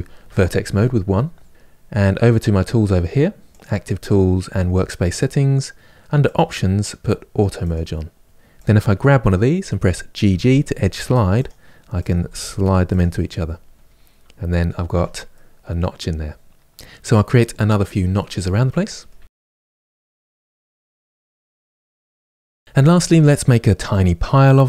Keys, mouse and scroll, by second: 0.0 1, 7.3-8.3 drag, 10.0 g, 11.8 click, 11.9 g, 13.5-14.6 scroll down 1, 14.6 Tab, 15.0-16.6 middle drag, 16.8 middle click, 16.8 Tab, 17.0 click, 17.1 ctrl+b, 17.5 click, 17.6 g, 17.8 click, 17.9 middle click, 18.0 click, 18.1 g, 18.2 Tab, 18.3 middle click, 18.5 Tab, 18.6 click, 18.7 g, 19.1 ctrl+b, 19.2 middle click, 19.3 click, 19.4 g, 19.7 click, 20.0 middle click, 20.5 click, 20.7 ctrl+b, 21.1 click, 21.2 g, 21.4 middle click, 21.4 scroll up 1, 21.6 click, 21.7 g, 22.0 Tab, 22.0 scroll down 2, 22.1-24.6 middle drag.